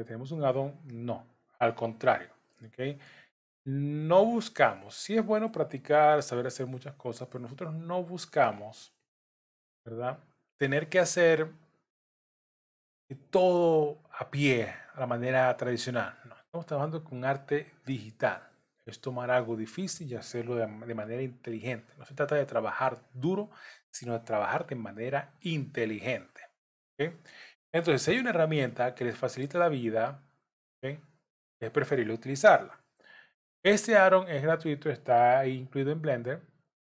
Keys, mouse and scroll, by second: 0.3 click, 1.1 click, 2.1 j, 2.5 middle click, 4.2 click, 5.0 shift+click, 6.1 j, 7.0 click, 7.8 shift+click, 9.0 j, 9.5 middle click, 11.6 click, 12.3 shift+click, 13.4 j, 13.8 middle click, 14.7 scroll up 1, 15.6 click, 17.0 shift+click, 18.1 j, 19.1 click, 19.9 shift+click, 20.9 j, 23.3 shift+click, 24.5 j, 25.0 middle click, 26.3 click, 26.9 shift+click, 28.0 j, 28.9 click, 29.6 middle click, 30.8 click, 31.5 shift+click, 32.6 j, 33.7 click, 34.5 click, 35.5 j.